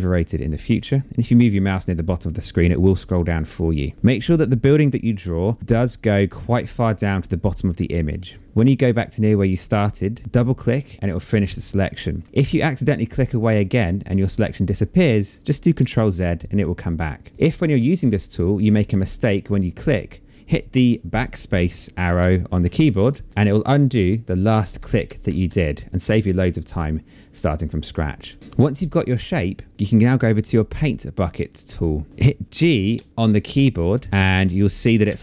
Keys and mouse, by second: 3.6 shift+click, 4.6 shift+click, 9.9 shift+click, 11.8 Escape, 12.2 click, 13.2 Escape, 17.3 click, 21.7 BackSpace, 23.4 click, 24.3 BackSpace, 32.5 space, 32.8 click, 34.6 g.